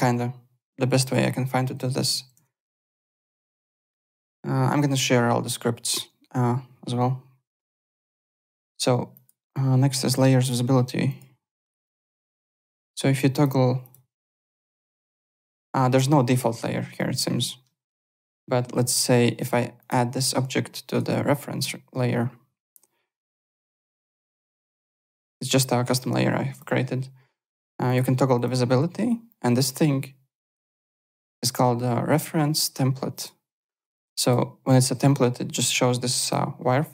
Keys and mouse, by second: 2.3 alt+Tab, 3.2 alt+click, 8.2 click, 9.1 click, 10.4 click, 11.0 click, 11.6 click, 12.5 click, 13.3 click, 19.8 click, 20.9 right click, 24.4 click, 26.5 click, 27.8 click, 30.4 click, 31.4 click, 32.1 click, 32.6 click, 33.7 click, 36.2 click.